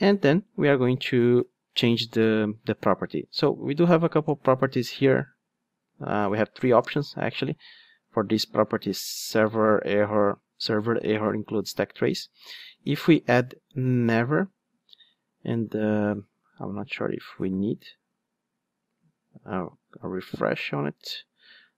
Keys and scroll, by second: 11.6 Return.